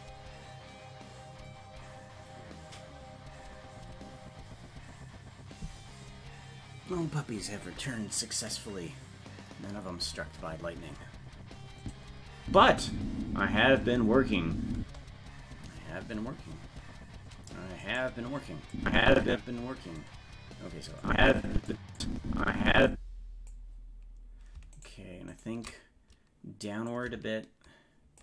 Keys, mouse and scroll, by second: 11.8 click, 12.4 space, 17.8 right click, 18.7-19.9 drag, 21.0 click, 21.9-23.5 drag, 24.8 shift+right click, 26.9-28.2 shift+drag.